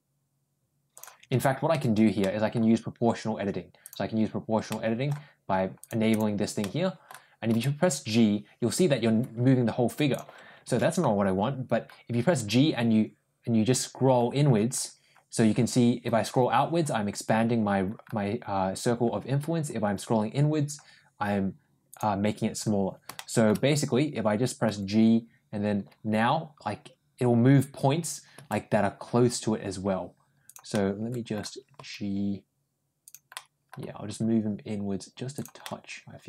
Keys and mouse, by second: 2.1 middle click, 3.7 ctrl+click, 4.5 ctrl+middle click, 5.6 click, 5.9 click, 6.4 middle click, 7.3 g, 12.1 ctrl+g, 23.0 shift+middle click, 24.5 g, 30.6 middle click, 32.2 g, 33.2 middle click, 33.9 g, 35.5-36.2 middle drag.